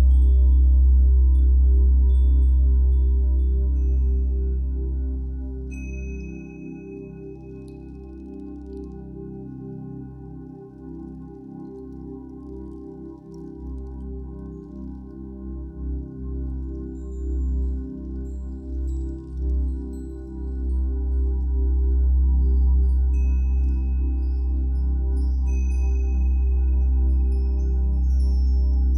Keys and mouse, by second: 0.0 click, 2.1 click, 4.5 click, 5.0 click, 6.1-6.5 typing, 7.7 click, 8.6 click, 9.6 click, 11.0 click, 12.0-12.5 typing, 14.0 click, 15.1 click, 16.0-17.4 drag, 20.1-20.6 drag, 20.9-22.3 drag, 26.4 click, 27.1 shift+click, 28.4 ctrl+i.